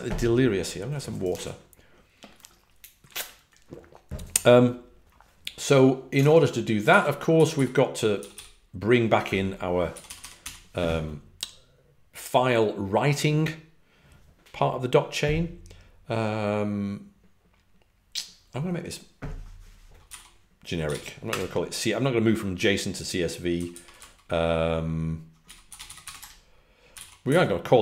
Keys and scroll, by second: 7.9-8.7 typing, 9.8-10.3 typing, 19.7-21.3 typing, 23.2-24.0 typing, 25.1-27.8 typing.